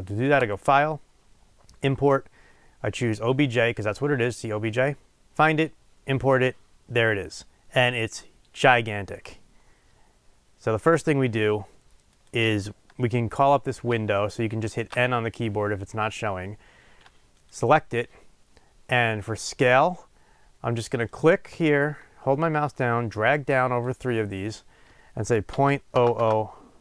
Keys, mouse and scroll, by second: 5.2 click, 8.4 scroll down 1, 10.7 scroll up 1, 12.2 click, 13.8 n, 17.4 click.